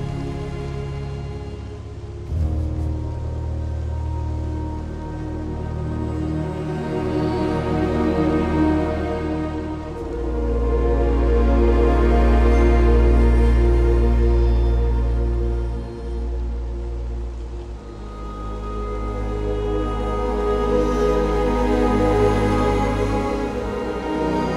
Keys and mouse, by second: 1.0-2.3 right drag, 4.1 2, 4.8 alt+click, 5.8 1, 9.0 alt+shift+click, 11.4 ctrl+click, 19.8 2, 20.6 g, 20.9 x, 23.4 click.